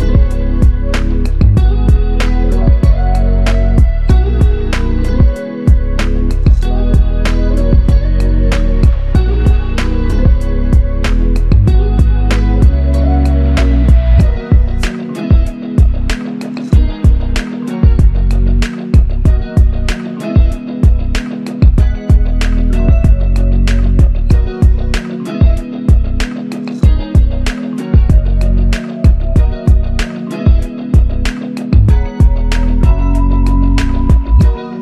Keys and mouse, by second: 1.7 double click, 8.0 alt+click, 11.1 ctrl+click, 14.3 double click, 17.1 double click, 17.4 ctrl+click, 20.2 ctrl+i, 20.5 ctrl+click, 21.2 ctrl+alt+click, 22.1 alt+click, 23.1 ctrl+alt+click, 26.0 ctrl+click, 30.2 ctrl+alt+click, 31.4 alt+click.